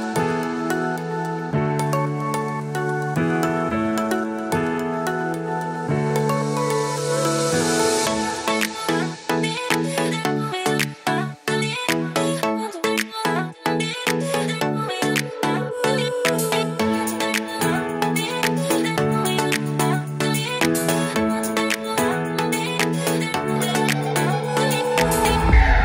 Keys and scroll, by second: 2.8 super+Right, 4.0 super+s, 11.3 super+s, 14.3 super+c, 19.5 super+s, 25.0 super+s.